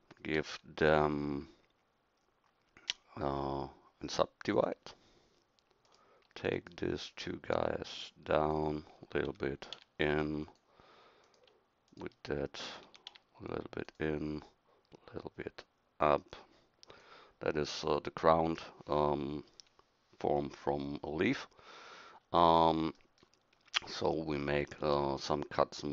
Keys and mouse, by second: 9.3 s, 12.8 s.